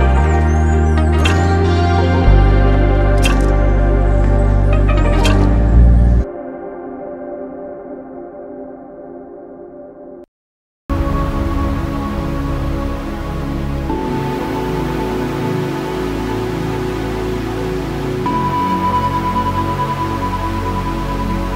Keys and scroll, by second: 16.1 3, 16.7 Return.